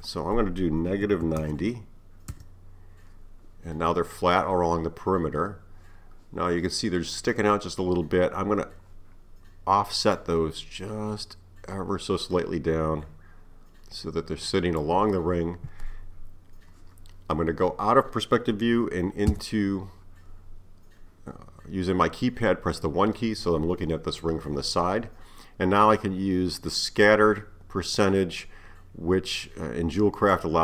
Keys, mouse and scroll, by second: 3.9-6.9 middle drag, 10.2-13.2 drag, 19.3 KP_1, 20.6-23.8 scroll down 3, 30.3-30.6 drag.